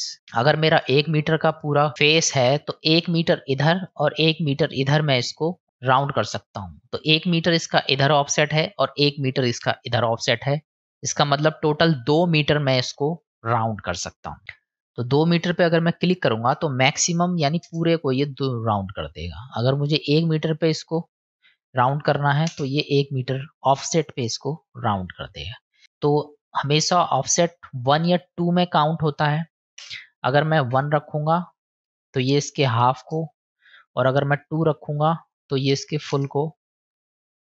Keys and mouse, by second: 3.9 middle click, 5.4-6.6 middle drag, 11.0-12.1 middle drag, 14.8-18.3 drag, 20.0-23.1 drag, 24.6 middle click, 27.4-33.4 drag, 34.5-36.6 drag.